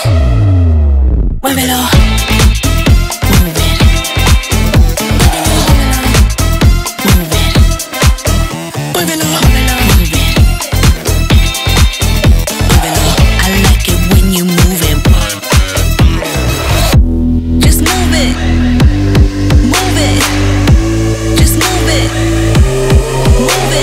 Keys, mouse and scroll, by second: 4.6 click, 4.7-6.3 drag, 10.7-14.2 drag, 14.8-16.9 ctrl+drag, 19.3-23.8 drag.